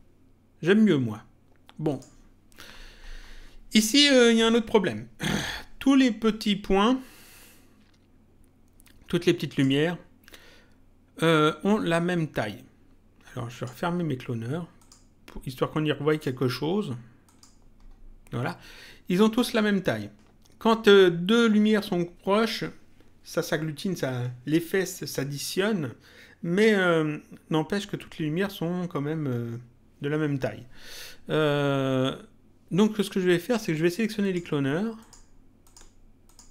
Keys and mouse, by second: 1.9 click, 9.4 click, 13.5 click, 14.8 click, 16.1 click, 17.2 click, 34.2 click, 34.9 ctrl+click.